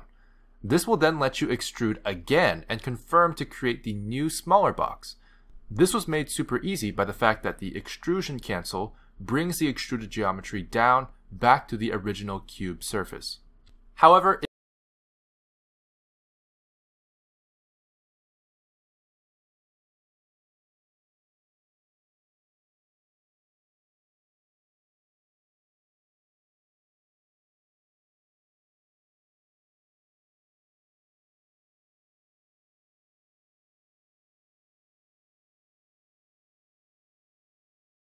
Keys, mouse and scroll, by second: 0.1 click, 10.1 click, 11.4 s, 14.2 click, 18.9 click, 20.4 ctrl+z, 25.4 click, 26.3 click, 27.6 e, 31.9 s, 33.1 e.